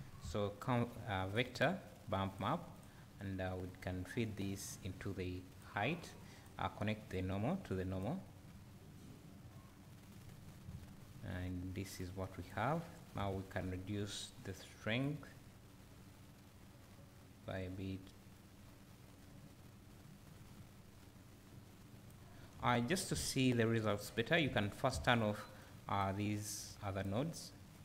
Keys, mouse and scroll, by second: 3.7-12.1 drag, 10.2 scroll up 2, 10.6 `, 15.2-27.8 drag.